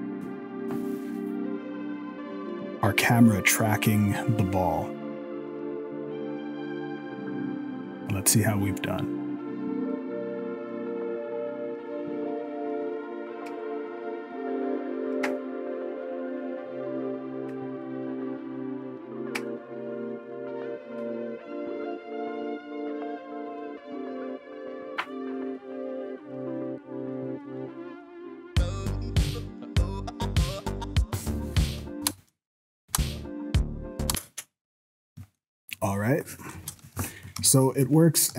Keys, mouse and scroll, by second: 24.4-27.3 scroll down 1, 32.0 space, 32.9 space, 34.1 space, 34.5-35.2 scroll down 2, 34.9-35.4 scroll up 2, 35.4 shift+middle click, 36.5 KP_0, 37.0 ctrl+s, 37.3 scroll down 5, 37.5 shift+middle click, 38.0 scroll up 4, 38.3 z.